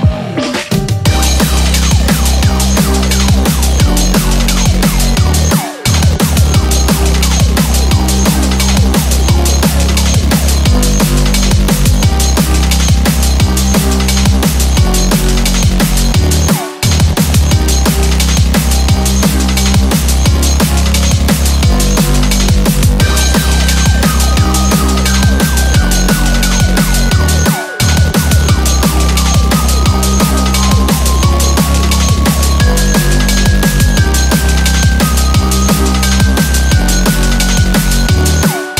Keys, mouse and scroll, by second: 0.0 scroll up 1, 1.0 s, 4.8 g, 11.4 s, 14.1 scroll down 5, 14.3 middle click, 15.6 scroll up 3, 15.8 middle click, 17.5 middle click, 18.2 KP_7, 18.8-19.3 scroll down 2, 20.2 g, 23.0 middle click, 23.8-24.7 scroll down 5, 24.5 middle click, 24.9-25.2 scroll up 4, 25.2 middle click, 26.2 click, 26.5 scroll down 1, 26.6 middle click, 27.2-27.5 scroll up 2, 27.9 KP_1, 28.2-28.7 scroll down 5, 28.7 shift+middle click, 29.0 scroll up 3, 29.8 click, 30.4 click, 30.6 scroll down 2, 31.0 shift+a, 33.7-34.5 scroll down 1, 34.5 s.